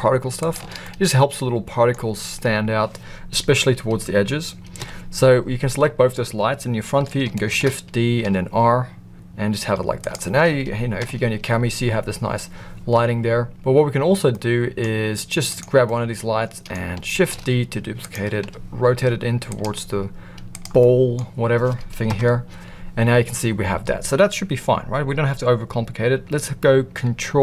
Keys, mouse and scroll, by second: 0.5 shift+click, 0.8-1.9 middle drag, 4.7 KP_1, 7.5 shift+d, 11.0 KP_0, 14.3-14.8 middle drag, 15.5 click, 15.8-16.7 middle drag, 17.1 shift+d, 18.4 r, 19.6 g, 20.8 middle click, 22.0 KP_0.